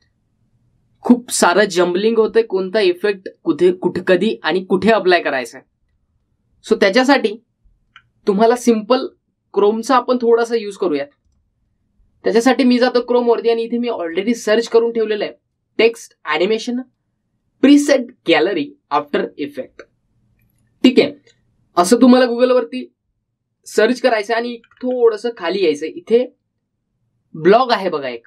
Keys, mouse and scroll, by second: 2.0-4.2 scroll up 2, 7.0 scroll up 1, 7.9 scroll up 1, 10.9 scroll, 11.1 scroll down 1, 12.4 click, 14.3-15.3 scroll up 1, 15.3-18.7 drag, 24.9-25.3 scroll down 1.